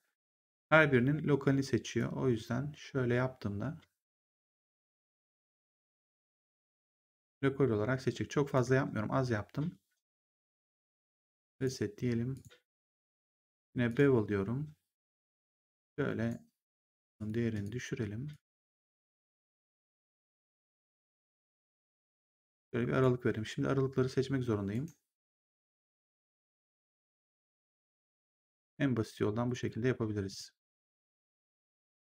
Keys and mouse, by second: 0.1 click, 1.8 click, 11.4 click, 13.8 click, 15.0 click, 16.6 click, 24.6 right click, 25.4 click, 26.0 shift+click.